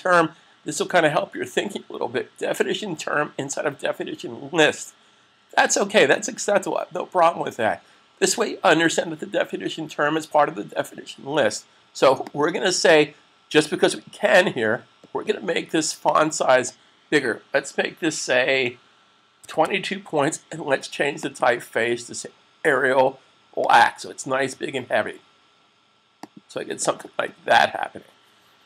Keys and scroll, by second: 19.3 typing, 22.1 typing.